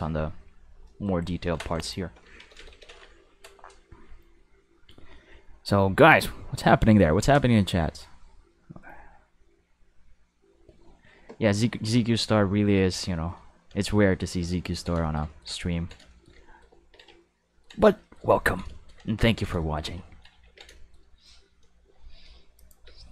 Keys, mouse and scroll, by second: 0.2 middle click, 0.6 middle click, 1.2 middle click, 1.8 click, 2.4 ctrl+s, 2.5 ctrl+s, 2.7 ctrl+s, 12.6 q, 13.3 middle click, 13.8 shift+middle click, 14.2 middle click, 14.5-14.8 ctrl+middle drag, 15.1 middle click, 15.3 ctrl+middle click, 15.8 middle click, 16.1 shift+middle click, 16.4 ctrl+middle click, 16.8 ctrl+s, 17.2-17.6 ctrl+middle drag, 18.0 shift+middle click, 18.4 ctrl+middle click, 18.8 middle click, 19.1 ctrl+middle click, 19.6 shift+middle click, 20.1 ctrl+middle click, 20.4 ctrl+s, 20.8 shift+middle click, 21.3 middle click, 21.6 middle click, 22.5 click, 22.8 space.